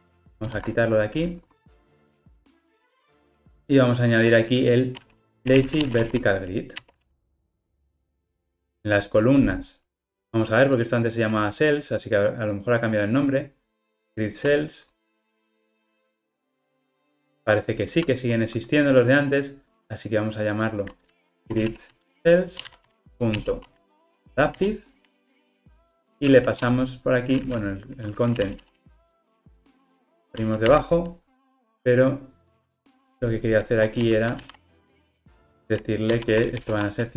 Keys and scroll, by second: 0.5 super+BackSpace, 1.9 Tab, 6.9 Return, 10.9 super+b, 18.2 alt+super+[, 23.2 Return.